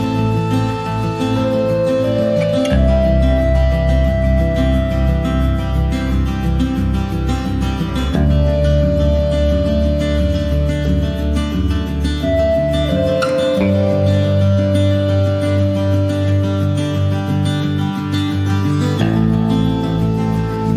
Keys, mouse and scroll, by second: 0.3 click, 0.5 s, 1.4 click, 1.6 scroll down 1, 1.6 middle click, 2.1 scroll up 1, 2.4 middle click, 2.8 ctrl+s, 2.9 click, 3.1 middle click, 3.4 scroll up 1, 3.6 ctrl+s, 5.8 middle click, 6.3 ctrl+s, 6.4 click, 6.7 shift+middle click, 7.5 click, 9.9 click, 10.2 middle click, 10.9 click, 11.8 click, 12.2 shift+middle click, 13.1 ctrl+s, 13.4 click, 13.8 scroll down 1, 14.0 shift+middle click, 14.8 ctrl+s, 15.0 click, 16.0 click, 16.7 shift+middle click, 17.2 ctrl+s, 19.2 click, 20.0 scroll down 1.